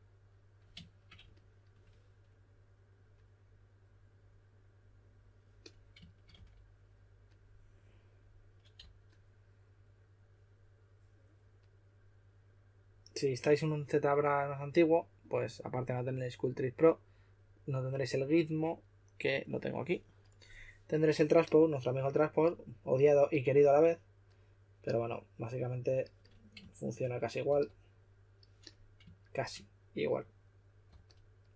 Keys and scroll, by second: 6.3 typing, 8.7 typing, 27.4 shift+w, 30.8-31.5 typing.